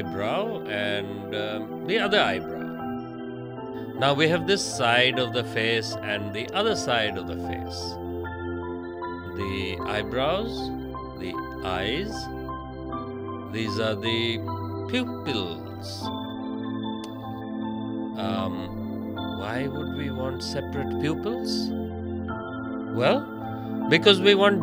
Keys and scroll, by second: 15.0 ctrl+z, 22.4 space.